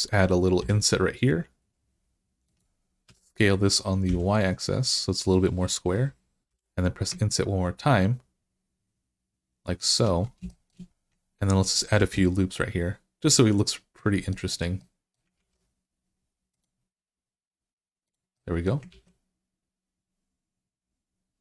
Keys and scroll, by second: 0.4 i, 2.9 s, 3.9 y, 6.3 i, 11.8 ctrl+r, 15.2 ctrl+r, 18.7 ctrl+r.